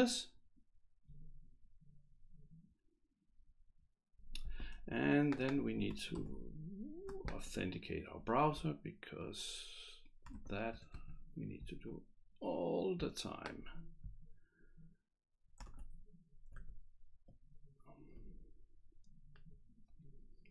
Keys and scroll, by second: 6.2 ctrl+c.